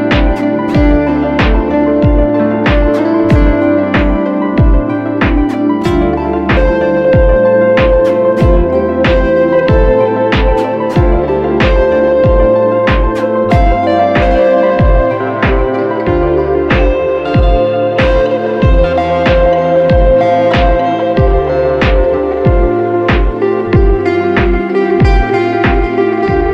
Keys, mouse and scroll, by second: 4.9 right click, 6.4 double click, 12.2 double click, 12.2 right click, 13.3 double click.